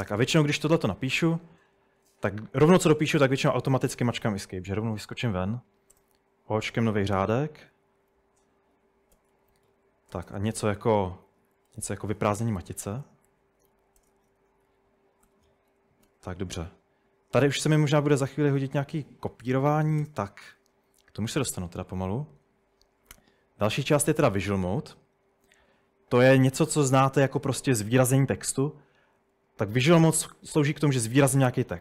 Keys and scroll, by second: 0.0-0.3 typing, 1.8 Escape, 5.1 o, 6.0 Return, 7.5-16.6 typing, 19.3 Escape, 19.6-20.5 typing, 30.6-31.8 typing.